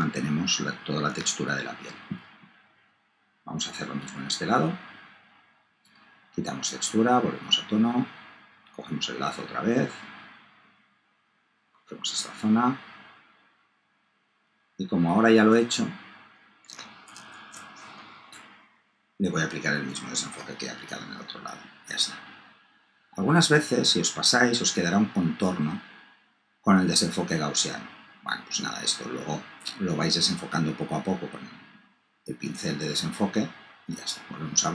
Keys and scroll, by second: 17.3 super+z.